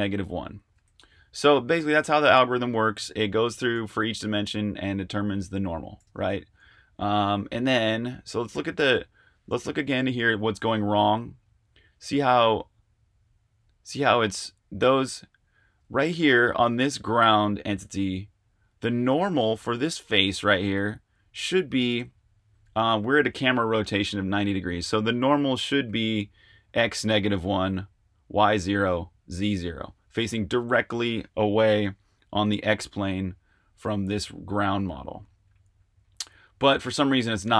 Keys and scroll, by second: 1.0 super+z, 1.8 super+Tab, 4.3-4.6 typing, 6.0 super+Tab, 8.5 typing, 9.7-10.6 typing, 12.3-13.6 typing.